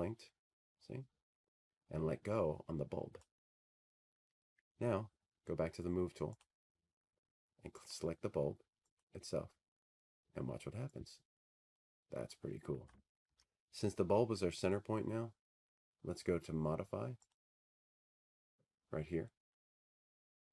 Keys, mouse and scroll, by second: 3.1 click, 8.7 click, 12.1 click, 13.6 click, 14.6 click, 18.4 click, 18.9 ctrl+z.